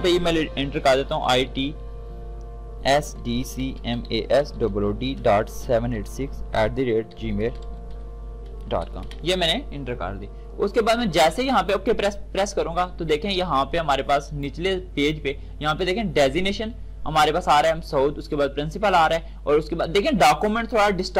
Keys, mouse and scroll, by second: 2.1-9.3 typing, 11.1 typing, 11.7 click, 14.4-21.1 drag.